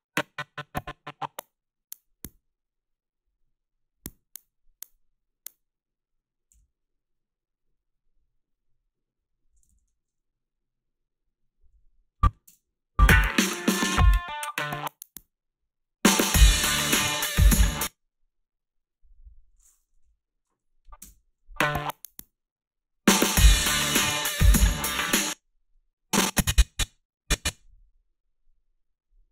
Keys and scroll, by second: 6.5 g, 9.7 ctrl+z, 12.5 space, 17.5 space, 20.0 Delete, 21.0 space, 25.0 space.